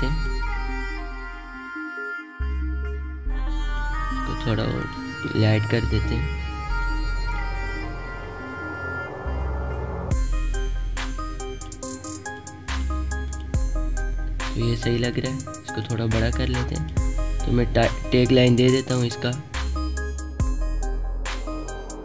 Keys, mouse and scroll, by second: 2.2-12.6 drag, 14.5-17.3 alt+shift+drag, 17.3-19.7 alt+shift+drag.